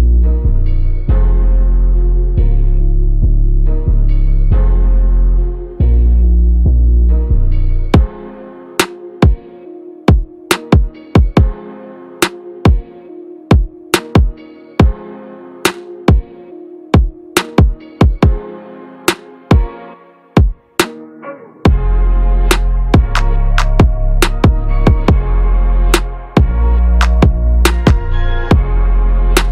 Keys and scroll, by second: 14.6 ctrl+a.